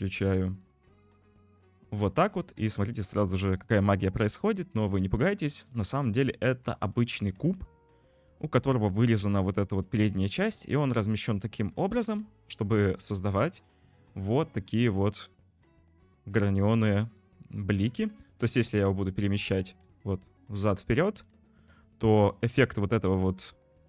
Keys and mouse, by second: 1.2 click, 4.8 click, 5.8 shift+middle drag, 6.7 click, 7.4 z, 7.9-9.2 middle drag, 10.1-11.0 middle drag, 11.5 `, 12.0 z, 18.7 click, 20.0 `, 20.5 g.